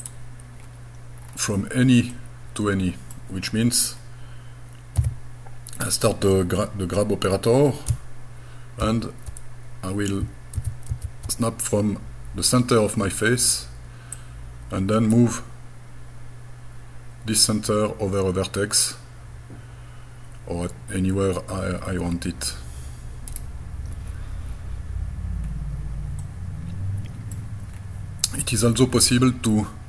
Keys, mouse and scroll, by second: 0.0 click, 0.6-1.2 scroll down 1, 1.2 scroll down 1, 2.1-3.1 middle drag, 4.0 scroll down 1, 5.0 g, 8.8 shift+e, 10.6 shift+e, 10.9 shift+f, 14.2 click, 23.3 right click, 25.4 scroll down 1, 26.2-27.3 middle drag, 27.8-28.4 scroll down 2, 28.3-28.6 scroll up 5, 29.0 middle click.